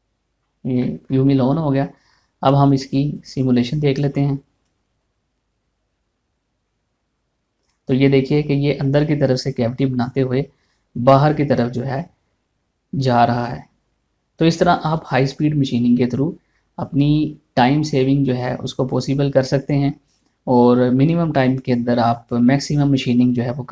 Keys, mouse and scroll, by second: 1.2 click, 1.4 shift+middle click, 3.7 click.